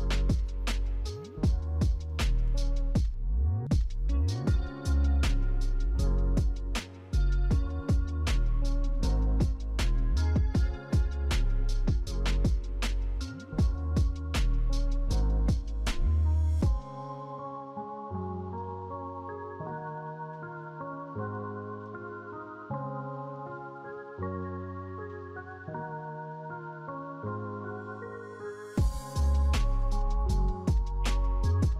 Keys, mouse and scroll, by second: 7.2 right click, 10.3 right click, 15.6 right click, 17.3 alt+w, 18.1 shift+f.